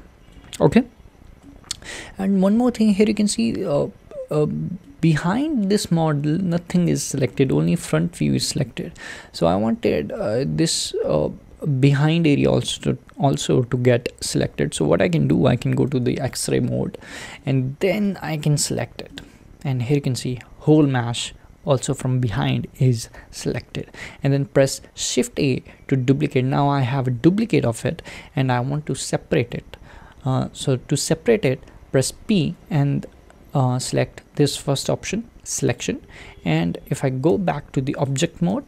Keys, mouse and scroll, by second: 15.9 alt+z, 16.4 click, 17.1-18.7 shift+middle drag, 18.7 click, 19.1-23.1 middle drag, 23.1 `, 25.0 shift+d, 37.3 Tab, 38.0 click, 38.5 alt+z.